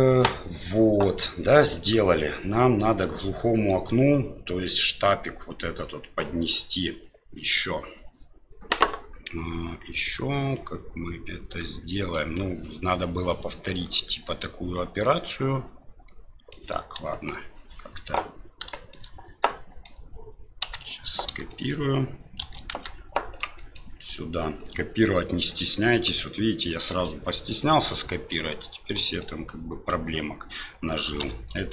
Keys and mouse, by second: 1.4-3.7 middle drag, 10.6-12.1 middle drag, 13.6-16.5 middle drag, 17.1 Delete, 17.9 middle click, 18.7 middle click, 19.5 middle click, 20.6 Tab, 21.5 middle click, 22.4 shift+d, 23.7 middle click, 24.0 right click, 25.5 middle click, 26.7 middle click, 29.0 middle click, 31.2 h.